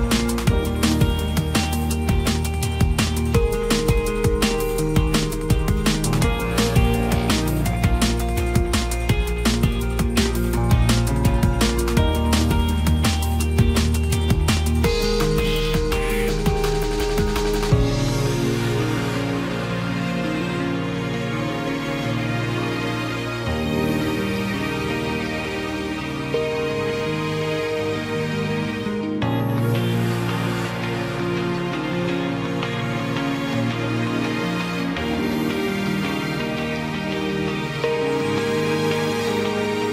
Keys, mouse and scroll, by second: 9.6 ctrl+t, 15.3 right click, 23.2 ctrl+z, 28.7 ctrl+t.